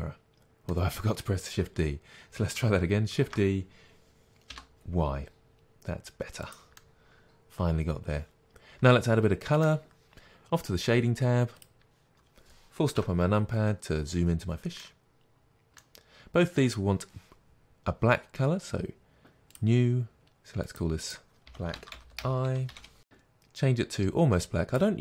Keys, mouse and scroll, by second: 4.8 shift+click, 6.8 middle click, 9.3-11.6 middle drag, 11.6 click, 13.0 KP_Decimal, 14.0-14.3 scroll down 1, 14.8-19.6 middle drag, 19.6 click, 23.0 Return, 23.0 click.